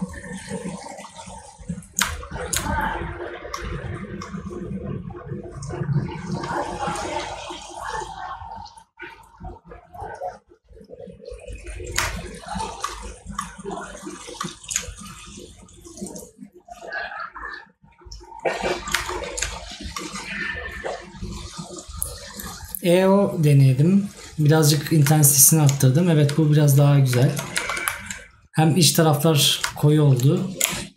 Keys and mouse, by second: 25.2 right click, 29.8 right click.